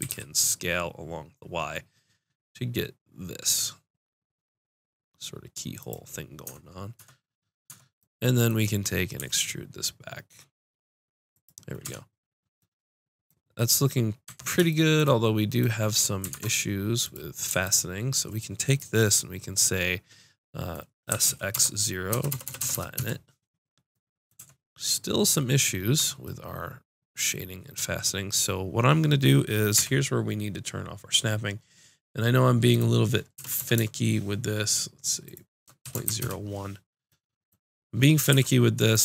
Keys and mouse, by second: 0.0 s, 6.9 Tab, 7.7 Tab, 9.2 e, 11.4 click, 11.8 Tab, 14.2 Tab, 16.3 ctrl+Tab, 17.6 click, 21.1 s, 24.4 Tab, 26.0 Tab, 29.7 n, 33.6 KP_0, 33.7 KP_0, 38.3 ctrl+r.